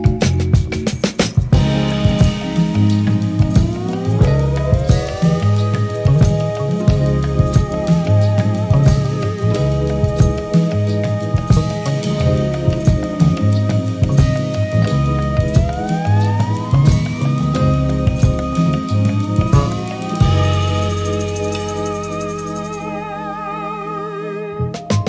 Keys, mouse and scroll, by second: 0.5 click, 0.5 middle click, 0.6 click, 0.8 click, 0.9 shift+middle click, 1.0 click, 1.1 click, 1.6 middle click, 1.7 ctrl+click, 1.9 middle click, 1.9 ctrl+click, 2.0 middle click, 2.1 KP_3, 2.1 f, 2.6 middle click, 2.6 click, 2.7 click, 2.8 middle click, 3.0 middle click, 3.1 f, 3.1 click, 3.2 click, 3.5 middle click, 3.6 click, 3.8 click, 3.9 middle click, 4.0 click, 4.6 ctrl+click, 4.9 middle click, 4.9 ctrl+click, 5.0 click, 5.0 middle click, 5.1 click, 5.5 f, 5.6 ctrl+click, 5.7 middle click, 5.8 click, 6.0 ctrl+click, 6.0 middle click, 6.2 click, 6.5 click, 6.7 click, 6.8 click, 7.0 middle click, 7.2 click, 7.4 click, 7.5 middle click, 7.6 shift+click, 7.7 click, 7.8 middle click, 7.9 shift+click, 8.2 click, 8.3 shift+click, 8.6 middle click, 8.9 middle click, 9.4 shift+click, 9.5 click, 9.6 middle click, 9.7 click, 9.9 click, 10.0 middle click, 10.1 click, 10.3 click, 10.5 ctrl+click, 10.8 click, 10.8 middle click, 10.9 click, 10.9 f, 11.2 shift+click, 11.5 shift+middle click, 12.0 shift+click, 12.2 shift+click, 12.4 middle click, 12.5 alt+click, 12.5 ctrl+z, 12.6 ctrl+click, 12.7 ctrl+click, 13.3 ctrl+click, 13.4 middle click, 13.4 click, 13.6 shift+click, 13.7 middle click, 13.9 middle click, 14.0 click, 14.1 click, 14.3 middle click, 14.4 shift+click, 14.5 f, 14.8 ctrl+z, 14.9 middle click, 14.9 shift+click, 15.3 shift+click, 15.6 shift+click, 15.8 ctrl+middle click, 15.9 click, 16.0 ctrl+alt+Page_Up, 16.0 middle click, 16.1 click, 16.2 click, 16.3 middle click, 16.4 click, 16.6 click, 16.7 f, 16.8 middle click, 16.9 f, 16.9 click, 17.1 click, 17.2 middle click, 17.2 click, 17.4 click, 17.6 middle click, 17.7 click, 17.8 click, 17.9 ctrl+z, 17.9 click, 18.1 middle click, 18.2 click, 18.2 f, 18.3 click, 18.4 middle click, 18.4 click, 18.6 click, 18.9 click, 18.9 f, 19.1 click, 19.4 click, 19.4 middle click, 19.5 f, 19.5 click, 19.8 click, 19.9 ctrl+middle click, 20.4 click, 20.5 click, 20.6 middle click, 20.7 click, 20.8 click, 20.9 ctrl+z, 21.3 click, 21.9 middle click, 22.0 f, 22.1 ctrl+click, 22.3 middle click, 22.4 click, 22.6 click, 23.4 f, 23.6 click, 23.7 shift+middle click, 23.9 click, 24.0 click, 24.2 ctrl+alt+Page_Up, 24.5 Delete, 24.6 ctrl+middle click, 24.8 middle click, 24.9 shift+click, 25.0 middle click.